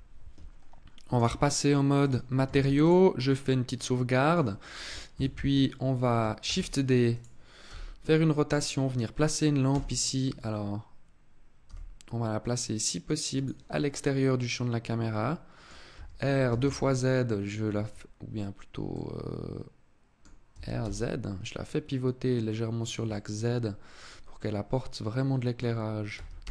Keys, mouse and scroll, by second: 0.9 click, 2.3 ctrl+s, 3.0-3.5 scroll down 4, 3.5 middle click, 4.9 KP_7, 6.1 shift+d, 6.9 click, 7.4 r, 8.4 click, 9.4 KP_0, 11.4 g, 13.2 click, 13.6 middle click, 15.7 r, 18.7 middle click, 20.3 r, 22.6 click, 22.8 middle click, 25.9 r.